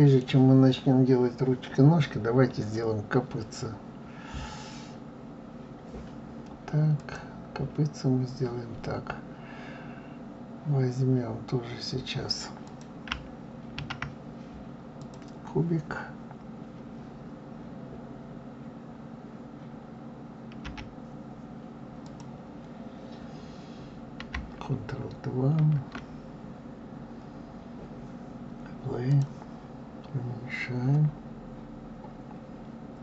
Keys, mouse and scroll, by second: 4.9-5.4 scroll up 1, 5.4-5.8 scroll down 2, 7.0-10.0 drag, 12.7 click, 13.8 shift+a, 20.6 g, 25.6 ctrl+2, 29.1 drag.